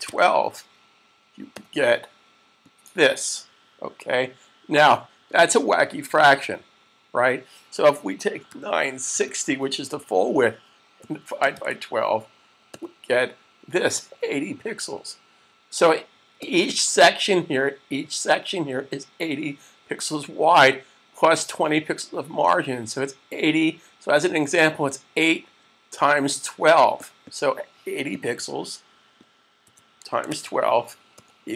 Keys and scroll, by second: 0.0-1.3 typing, 8.1-9.7 typing, 10.8-12.6 typing, 29.7-31.1 typing.